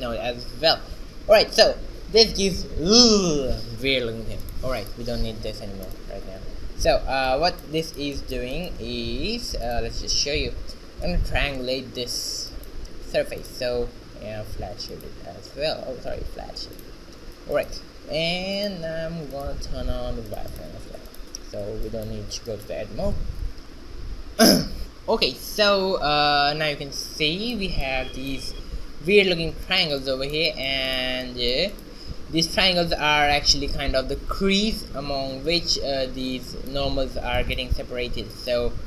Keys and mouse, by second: 3.0-5.9 drag, 5.9-7.9 middle drag, 7.9 shift+z, 8.2 click, 8.5 Tab, 9.0 a, 9.3 a, 10.2 ctrl+t, 11.7 a, 12.4 a, 12.6 z, 14.0 Tab, 14.4 z, 15.6 Tab, 18.8 click, 19.3 a, 19.9 Tab, 20.7 a, 30.1-32.1 middle drag, 32.1 shift+z, 35.0-38.8 middle drag.